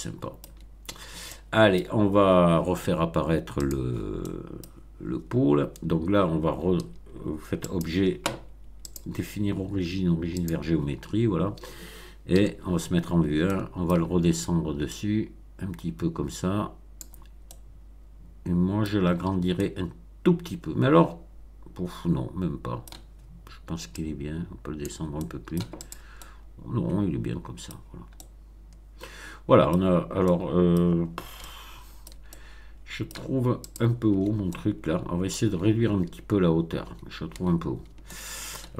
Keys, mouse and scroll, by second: 0.4 Tab, 0.9 scroll down 1, 1.2-1.9 middle drag, 3.5 click, 4.1 middle click, 4.6-4.9 scroll down 1, 7.6 click, 8.9 click, 10.3 click, 12.3 1, 13.0 scroll up 3, 13.4-14.0 shift+middle drag, 14.9-17.1 drag, 17.4-19.0 middle drag, 19.0-19.4 scroll up 1, 19.5-23.0 middle drag, 23.9-24.9 drag, 25.1-25.7 middle drag, 25.7 click, 26.1-27.7 middle drag, 27.7 scroll down 2, 28.1-29.6 middle drag, 29.6-30.2 scroll down 2, 30.2 middle click, 31.3-32.2 shift+middle drag, 32.3-33.2 shift+middle drag, 33.6 click, 34.1 Tab, 34.4-35.5 middle drag, 35.5 Tab, 36.8 Tab, 38.0 shift+middle click.